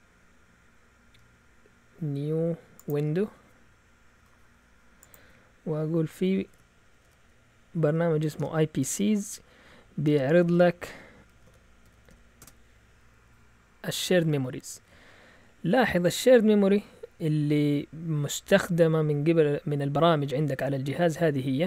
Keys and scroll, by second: 6.1-12.6 typing.